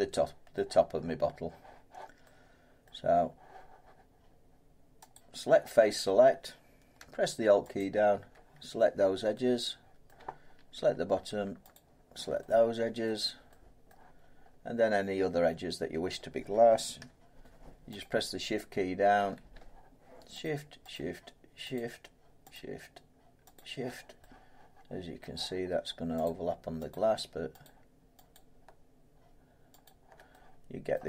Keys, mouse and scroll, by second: 0.5 scroll, 2.8 middle click, 5.1 click, 7.7 alt+click, 10.0 middle click, 11.7 click, 13.0 middle click, 13.9 middle click, 14.4 scroll up 4, 18.0 shift+click, 19.0 scroll, 19.1 shift+click, 20.4 shift+click, 25.2 scroll, 26.2 shift+click, 30.9 middle click.